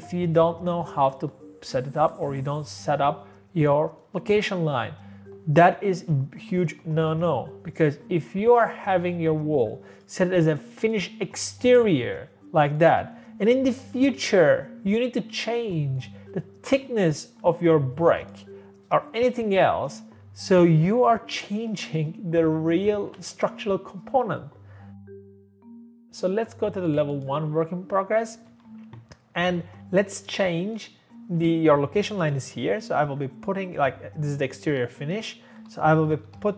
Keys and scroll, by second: 13.7 Escape, 13.8 Escape, 14.0 Escape, 25.0 Escape, 25.2 Escape, 25.7 Escape, 28.5 Escape, 35.6-36.2 typing.